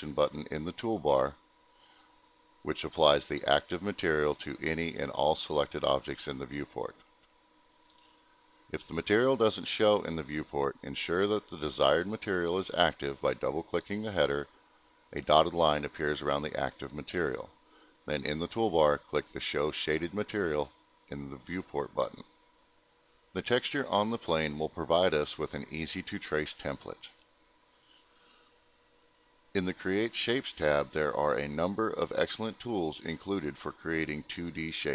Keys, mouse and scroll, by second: 0.1 double click, 0.6 double click, 0.8 double click, 0.9 double click, 2.0 click, 4.6 click, 18.6 click, 21.0 click, 24.0 click, 25.4 scroll, 26.7 click, 27.8 click, 31.5 click.